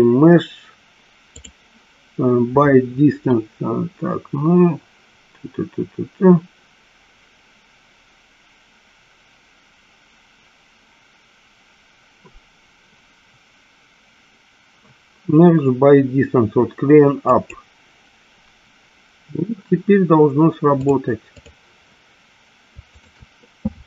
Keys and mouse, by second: 1.5-17.6 drag, 21.0 click, 23.0 shift+click.